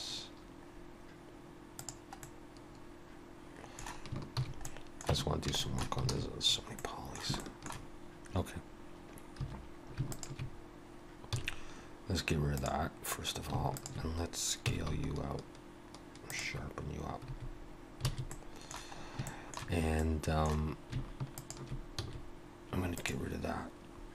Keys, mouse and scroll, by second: 0.7 scroll up 2, 1.8 click, 2.2 middle click, 4.4 shift+h, 4.7 middle click, 5.1 Tab, 5.6 shift+middle click, 6.1 alt+a, 6.5 scroll up 4, 6.7 middle click, 7.4 shift+middle click, 9.4 2, 10.1 alt+shift+click, 11.3 x, 13.8 alt+shift+click, 14.7 s, 18.2 alt+a, 18.3 middle click, 19.0 scroll up 2, 19.3 shift+middle click, 20.0 middle click, 21.4 alt+shift+click, 22.0 x.